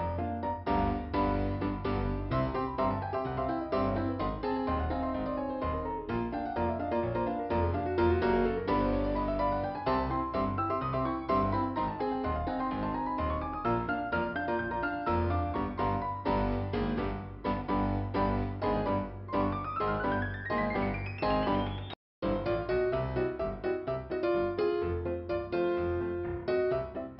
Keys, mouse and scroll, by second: 5.2 click, 6.6 click, 7.5 p, 8.0-8.5 scroll down 2, 10.2 click, 11.2 click, 13.4 click, 14.6 scroll up 2, 15.8 click, 17.1 click, 18.5 scroll down 2, 21.7 click, 21.9 click, 22.7 click, 23.5 click, 24.6 click, 26.2 click.